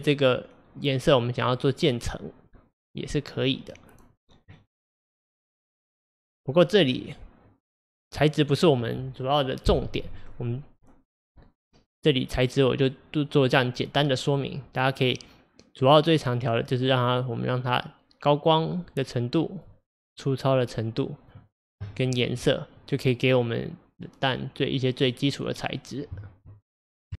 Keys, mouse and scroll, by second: 4.0 click, 7.0 click, 16.8-19.8 drag, 20.2-21.9 drag, 21.9-22.4 scroll up 1, 22.4-22.8 scroll up 1, 22.8-25.9 middle drag.